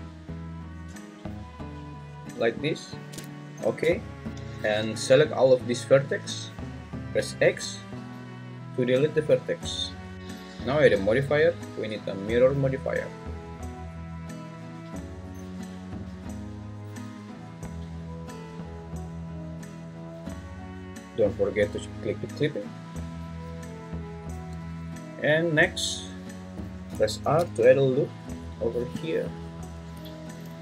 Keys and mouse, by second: 2.6 click, 4.3 Escape, 5.0 click, 5.3-6.4 drag, 7.1 x, 13.1-18.6 drag, 22.2 click, 24.3 `, 27.2 ctrl+r, 30.3 Escape.